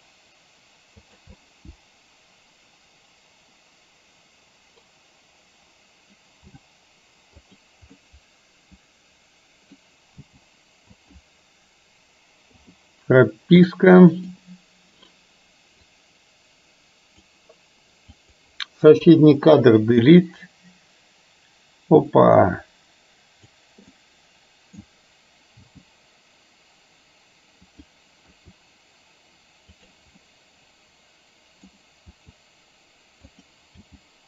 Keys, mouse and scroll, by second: 1.4 drag, 1.5-4.9 middle drag, 6.5 g, 8.0-9.9 middle drag, 10.3 g, 12.5 i, 13.7-14.4 middle drag, 15.9 click, 18.2 click, 19.2 Delete, 20.3-23.7 drag, 24.0-24.9 middle drag, 25.7 g, 28.4 r, 30.3-31.7 middle drag, 32.2 r, 33.9 g.